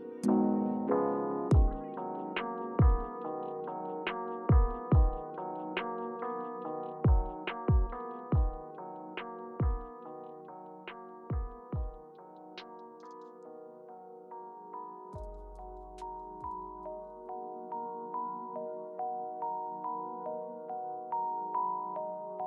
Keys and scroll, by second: 0.1 super+z, 6.8 typing, 8.7 scroll down 1, 8.8-9.3 scroll up 1, 9.3-11.4 scroll down 1, 11.4-12.5 typing, 13.5 space, 16.5 super+y, 17.2 super+y, 17.5 super+z, 22.1 Return.